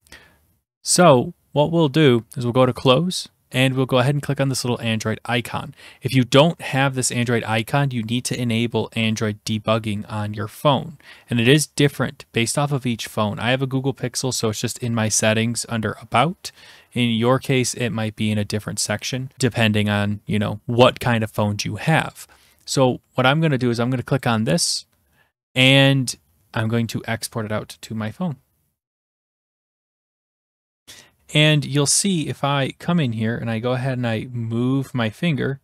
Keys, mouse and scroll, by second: 2.9-4.0 drag, 24.2-25.2 drag.